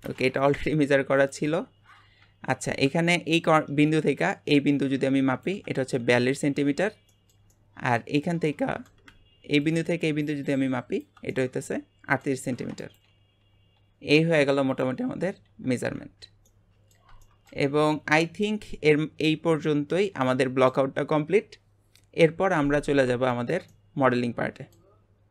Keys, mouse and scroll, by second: 0.4 click, 1.2 click, 1.4 Delete, 1.6 Delete, 2.1-3.1 scroll up 2, 3.6-6.6 ctrl+drag, 7.1-9.6 shift+middle drag, 9.6-11.3 ctrl+drag, 11.3-12.8 middle drag, 12.8 click, 13.4 Delete, 13.8 Delete, 14.7 click, 15.1 Delete, 15.5 Delete, 15.9 scroll down 1, 16.5-22.6 middle drag, 23.0 scroll down 2, 23.3-25.3 shift+middle drag.